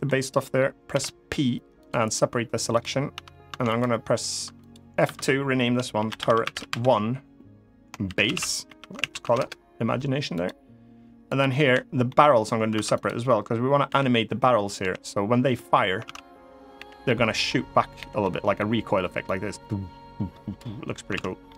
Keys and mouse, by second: 0.6 p, 2.5 click, 2.8 Tab, 3.2 Tab, 3.5 click, 4.2 Tab, 4.8 F2, 6.0 r, 10.1 click, 11.0 click, 11.4 l, 11.8 middle click, 12.4 Tab, 12.7 click, 13.6 l, 14.5 l, 15.8 ctrl+z, 16.5 l, 16.8 middle click, 17.7 l, 17.9 middle click, 18.9-20.3 drag, 20.9 ctrl+z, 21.2 middle click.